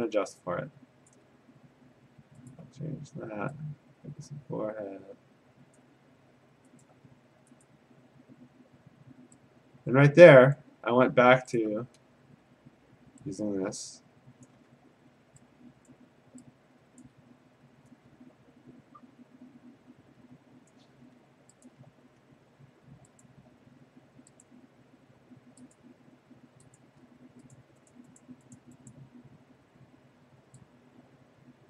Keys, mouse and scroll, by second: 1.1 ctrl+click, 2.5 alt+click, 5.8 click, 6.5 click, 6.8 alt+click, 7.7 click, 10.5 click, 10.9 click, 11.6 alt+click, 14.5 click, 15.9 ctrl+click, 16.6 ctrl+click, 17.0 click, 20.7 click, 21.7 alt+click, 23.2 click, 24.4 click, 25.8 click, 26.8 click, 27.6 click, 28.1 click, 28.2 click, 28.6 click, 28.9 click.